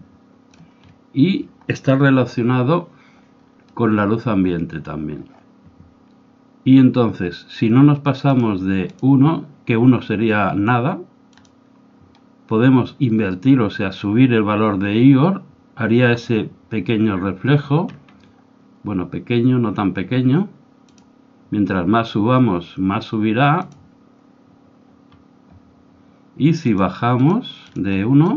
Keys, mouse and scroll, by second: 0.0-1.7 drag, 0.9-2.6 middle drag, 8.1-10.7 drag, 11.5-13.4 drag, 17.9-20.1 scroll down 1, 21.0-22.7 drag, 23.6-25.4 drag, 25.1-28.3 middle drag, 26.6-28.3 drag.